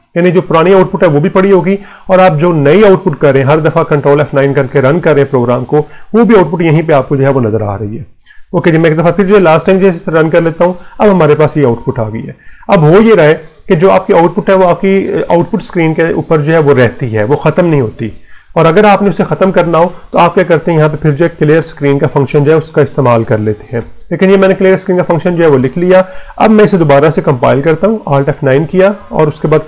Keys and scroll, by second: 7.5 Return, 9.6 ctrl+F9, 11.9 Return, 19.3 Return, 20.3-23.7 typing, 27.7 alt+F9, 28.7 Return.